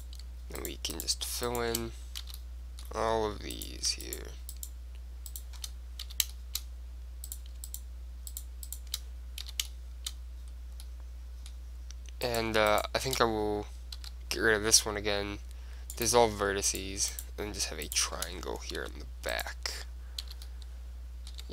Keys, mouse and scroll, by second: 2.4 f, 3.7-7.0 right drag, 4.1 middle click, 6.2 f, 6.4-8.2 middle drag, 7.4 click, 8.2-9.8 right drag, 9.6 f, 9.8 click, 9.8 middle click, 11.2-12.4 middle drag, 12.4 click, 12.6-14.5 right drag, 14.1 x, 16.8-19.8 right drag, 18.9 g, 20.4 f, 20.5-21.5 middle drag, 21.4 Tab.